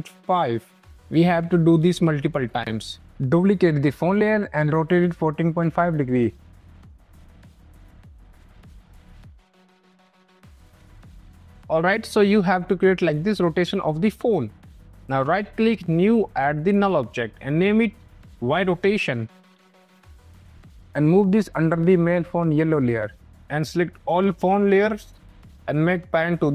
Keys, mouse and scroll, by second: 0.0-0.1 typing, 1.0 Return, 1.8 click, 3.0 ctrl+d, 3.3 r, 3.7 click, 4.5-10.7 typing, 5.6 click, 5.7 click, 6.5 click, 6.7 click, 7.1 click, 7.3 click, 7.8 Return, 7.9 click, 8.1 click, 8.4 Return, 8.7 click, 9.0 click, 9.1 click, 9.6 click, 10.1 click, 10.3 click, 10.8 click, 14.5 click, 14.9 right click, 15.5 click, 16.9 click, 17.7 right click, 18.6 click, 19.1-21.1 typing, 21.1 click, 22.9 click, 26.2 click.